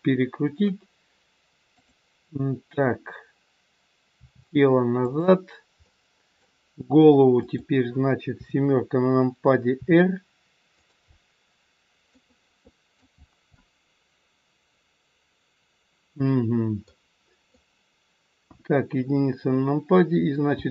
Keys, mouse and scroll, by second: 1.7 click, 4.1 r, 5.8 middle click, 7.3 click, 8.3 KP_7, 9.7 r, 11.1 middle click, 11.1 scroll up 1, 13.1-13.6 scroll down 2, 13.6 middle click, 17.4 click, 17.4 middle click, 18.5 KP_1, 20.6 g.